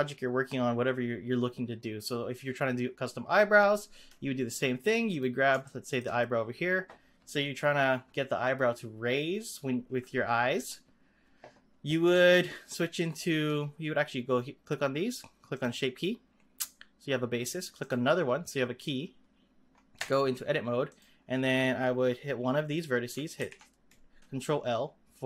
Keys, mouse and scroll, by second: 5.1 click, 5.6-8.8 shift+middle drag, 15.5-19.9 drag, 19.9 Tab, 20.8 click, 23.3 ctrl+l.